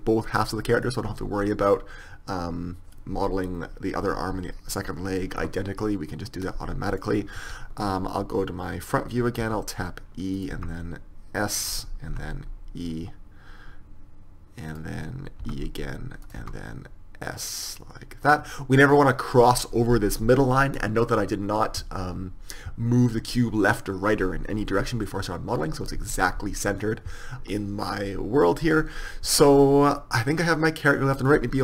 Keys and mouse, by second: 2.5 middle click, 5.4-7.0 middle drag, 8.4 KP_1, 9.5 e, 10.6 s, 12.2 e, 15.5 e, 16.4 s, 29.5-31.5 middle drag.